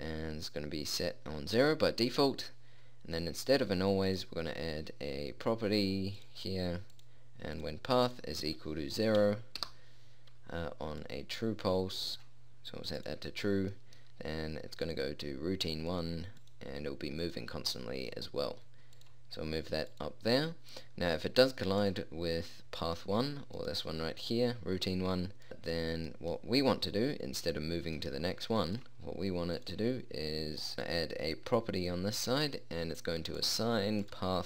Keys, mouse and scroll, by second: 3.9-6.8 drag, 7.5-10.3 drag, 11.2 middle click, 15.1 middle click, 24.1-25.5 middle drag, 25.5-27.1 right drag, 29.1-30.7 drag.